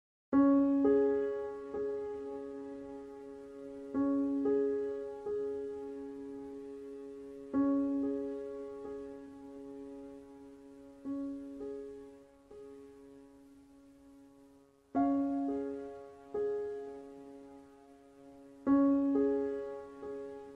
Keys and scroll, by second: 0.0-0.6 typing, 3.3 BackSpace.